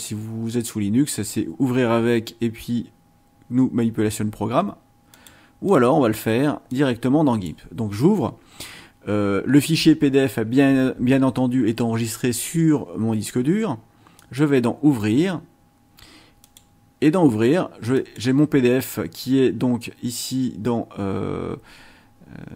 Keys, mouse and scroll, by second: 5.1 click, 5.7 click, 6.7 click, 14.2 click, 16.4 click, 17.9 click.